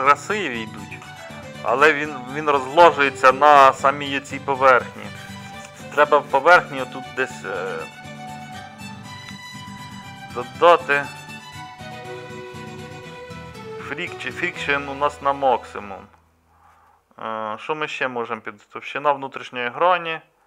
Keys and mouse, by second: 1.8-4.4 middle drag, 4.9-9.2 middle drag, 9.9-20.4 middle drag.